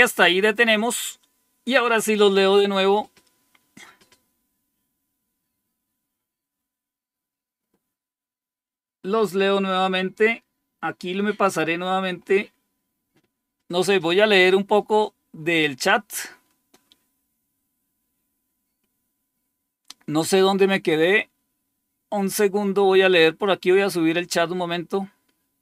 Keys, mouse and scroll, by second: 11.3 click, 21.5-23.5 scroll up 2, 23.5-25.6 scroll up 1.